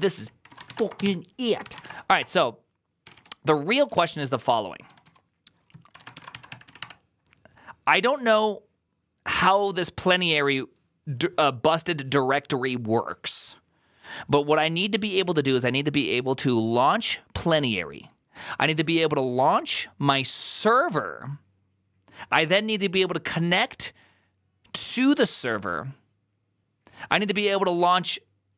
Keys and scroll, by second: 0.0-3.4 typing, 0.1 ctrl+c, 3.8 ctrl+o, 4.1 ctrl+o, 4.5-6.9 typing, 5.8 ctrl+a.